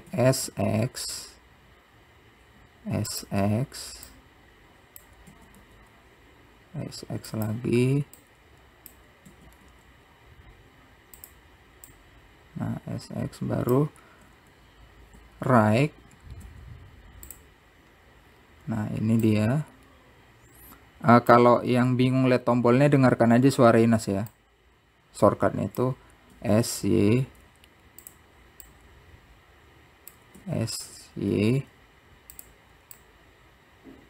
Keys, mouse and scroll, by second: 1.8 click, 3.0 s, 5.0 s, 5.9 click, 7.0 s, 9.6 click, 12.9 `, 14.1 `, 15.9-16.4 scroll down 5, 16.9 click, 20.1-20.7 scroll up 3, 20.7 scroll up 3, 22.0 click, 24.0 s, 26.3 click, 28.1 s, 30.8 click, 32.2 s.